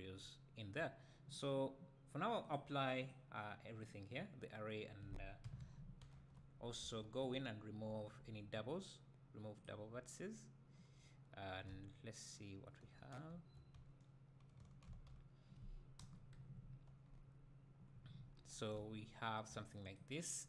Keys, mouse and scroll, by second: 2.4-3.3 drag, 3.8-7.3 drag, 5.4 KP_1, 6.0 scroll up 2, 6.2 Tab, 6.8 a, 7.3-13.3 right drag, 11.7 `, 13.3 2, 14.1 right click, 14.1-14.9 scroll down 2, 14.9 alt+a, 16.0 KP_1, 17.0-17.8 scroll up 2, 17.8 scroll up 1, 18.1-18.4 scroll down 2, 18.4 Tab, 18.8-20.4 right drag.